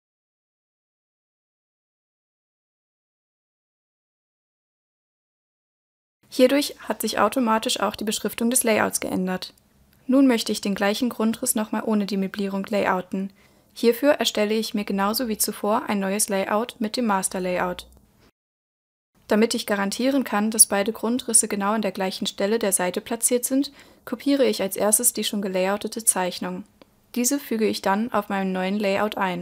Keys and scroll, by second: 23.9 super+c, 26.7 super+v.